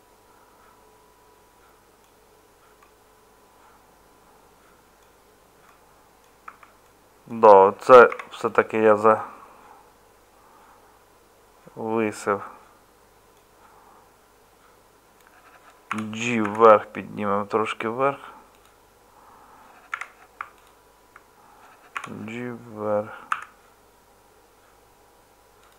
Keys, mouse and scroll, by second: 6.4 Tab, 8.1 3, 15.9 g, 19.9 2, 21.9 g.